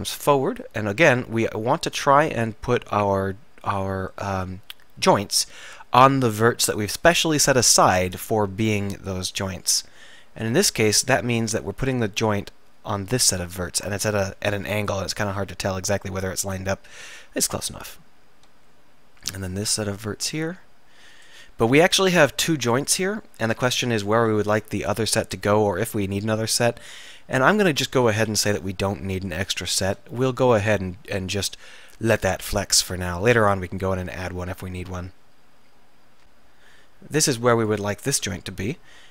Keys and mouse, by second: 8.6 e, 12.6-14.3 drag, 14.9 KP_1, 15.4 KP_7, 18.6 e, 21.9 middle click, 22.1 middle click, 24.1 KP_7, 25.1 KP_1, 25.4 KP_3, 27.3 KP_1, 28.4 KP_7, 33.6 e, 36.3-39.1 drag.